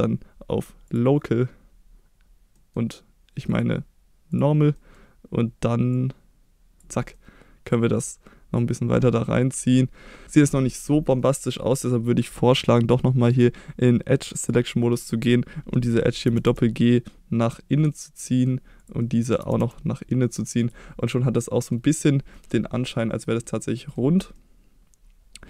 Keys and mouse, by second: 2.5 middle click, 3.5 click, 4.7 middle click, 5.9 click, 7.1 middle click, 8.2 middle click, 9.3 middle click, 10.8 middle click, 13.3 click, 15.0-16.2 middle drag, 16.2 g, 16.4 g, 17.4 click, 17.7 middle click, 18.8 click, 19.0 middle click, 19.4 g, 19.6 g, 20.6 click, 21.0 middle click, 22.3 middle click, 23.4 middle click, 24.4-25.4 middle drag.